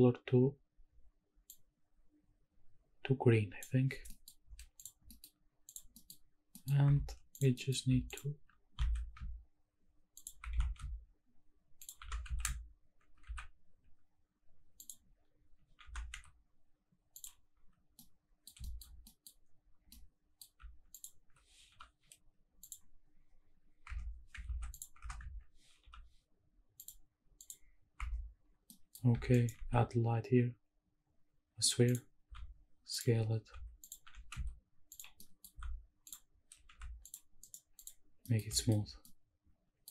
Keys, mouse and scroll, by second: 0.5-1.5 scroll up 1, 1.5-3.6 drag, 4.0-5.1 scroll down 4, 4.1 middle drag, 4.8 click, 5.1 middle drag, 5.4 scroll up 2, 5.6 click, 5.9 middle drag, 6.3 scroll up 1, 6.5 middle click, 6.9 Tab, 7.3 click, 7.5 middle click, 8.1 alt+click, 8.7 e, 9.1 s, 10.1 shift+click, 10.5 s, 10.5 e, 11.8 shift+click, 12.0 e, 12.3 z, 13.2 z, 14.8 click, 15.8 e, 16.1 z, 17.1 click, 18.0 middle click, 18.6 shift+middle click, 18.9 scroll up 1, 19.1 middle click, 19.9 middle click, 20.9 alt+click, 21.7 u, 23.9 Tab, 24.4 ctrl+a, 25.0 Tab, 25.2 a, 25.8 u, 27.9 Tab, 28.7 middle click, 29.3 shift+right click, 29.5 shift+a, 32.5 s, 32.9 click, 33.4 s, 33.9 click, 34.1 g, 34.3 z, 34.9 click, 35.2 middle click, 35.6 s, 36.1 click, 36.7 s, 37.1 drag, 37.4 right click, 38.2 middle click, 38.4 scroll down 1, 38.5 shift+middle drag, 38.9 scroll up 1, 39.0-39.9 middle drag.